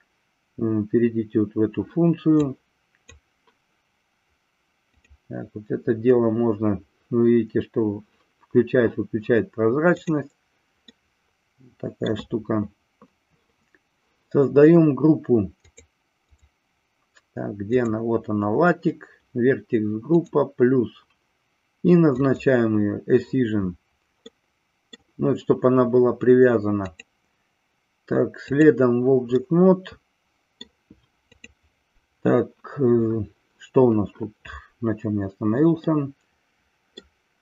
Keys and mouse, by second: 2.6 click, 4.8 click, 10.8-12.1 middle drag, 15.7 click, 16.3 click, 17.7 click, 20.1 click, 22.3 click, 24.2 middle click, 26.8-28.7 drag, 29.4-30.7 middle drag, 35.8-37.0 middle drag.